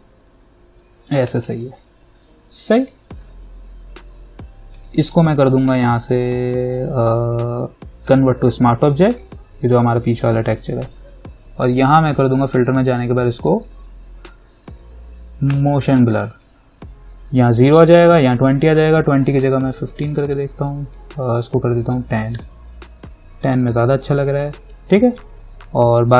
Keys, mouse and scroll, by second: 4.9 right click, 8.3 click, 15.7 click, 18.7 click, 19.6-20.6 typing, 21.5 click, 22.1-22.5 typing, 24.0 click.